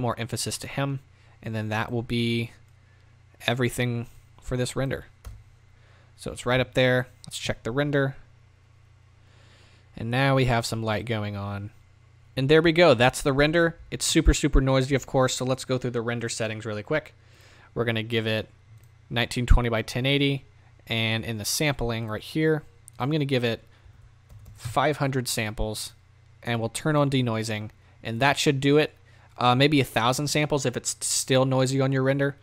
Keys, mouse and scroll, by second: 1.4-2.0 drag, 2.0 scroll down 1, 2.7 click, 5.2 KP_0, 7.2 z, 8.4-9.9 drag, 12.1 middle click, 16.8 z, 24.6 KP_0, 26.9 click.